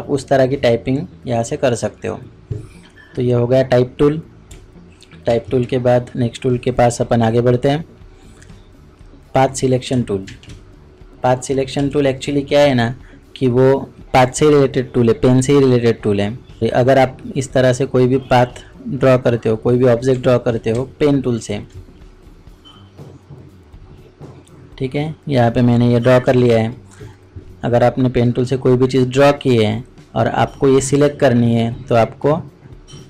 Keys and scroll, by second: 5.3 ctrl+Tab, 10.3 ctrl+shift+Tab, 20.7-21.4 ctrl+space.